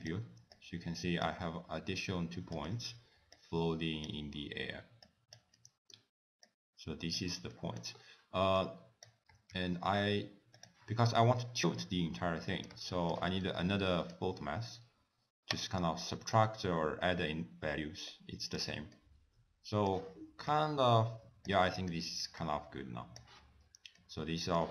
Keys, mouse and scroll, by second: 0.1 click, 0.6 click, 2.6 click, 5.1 click, 5.6 middle click, 5.6-6.5 scroll down 1, 6.5 click, 7.5 middle click, 8.0-8.6 scroll up 2, 8.6 click, 9.8 shift+d, 11.4 middle click, 12.9 shift+middle click, 13.4-13.9 scroll up 2, 13.9 middle click, 13.9 scroll up 3, 15.6 click, 16.1 click, 18.9 middle click, 20.5 click, 21.7 middle click, 22.5 click, 23.6-24.0 scroll down 2, 24.0 middle click.